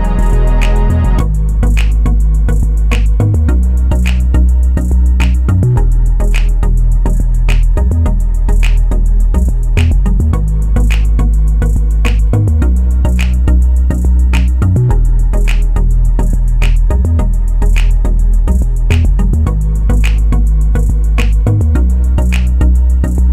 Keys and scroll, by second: 1.5-2.4 typing, 12.4-13.3 typing.